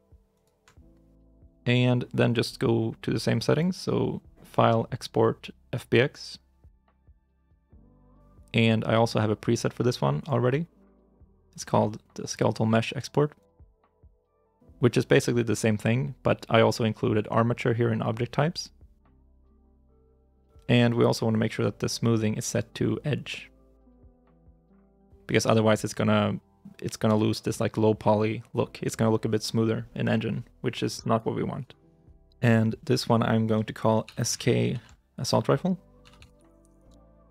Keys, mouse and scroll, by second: 0.2 shift+right click.